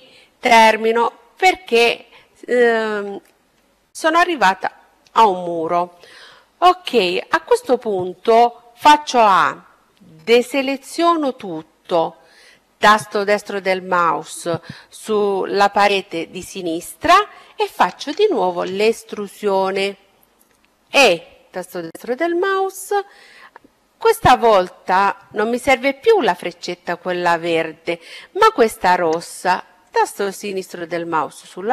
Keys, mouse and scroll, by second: 7.9 a, 11.7-13.7 right drag, 17.2-19.8 middle drag, 19.8 e, 28.7-30.7 drag.